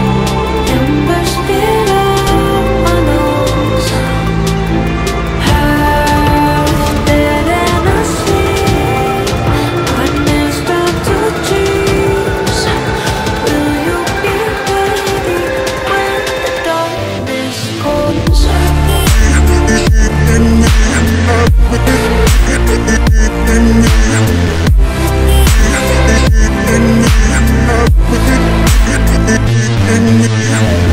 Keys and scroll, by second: 14.8 F3, 15.3 Escape, 22.6 Delete.